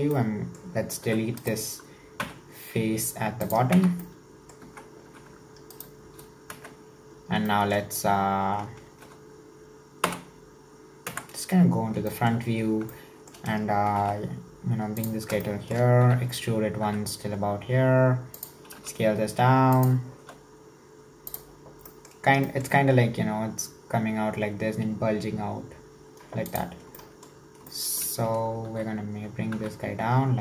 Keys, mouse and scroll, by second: 0.1 scroll down 3, 0.2 middle click, 1.0 3, 1.4 right click, 2.2 x, 3.8 Tab, 3.9 scroll down 1, 4.1 middle click, 4.6 Tab, 5.1 2, 5.7 alt+right click, 6.6 KP_1, 7.2-7.5 scroll up 1, 7.5 shift+middle click, 8.3-8.9 scroll down 1, 8.9 alt+z, 10.0 /, 11.1 KP_1, 11.6-12.1 scroll up 1, 12.1 shift+middle click, 12.5-12.9 scroll up 1, 12.9-13.9 shift+middle drag, 13.9 g, 15.4-16.1 shift+middle drag, 16.1 e, 27.0-28.7 shift+middle drag, 28.7 e.